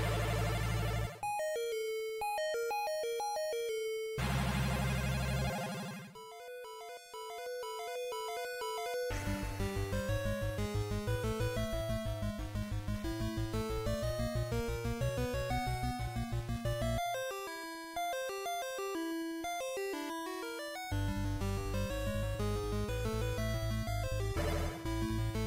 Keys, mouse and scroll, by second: 6.2 click, 19.8 click, 23.8 s.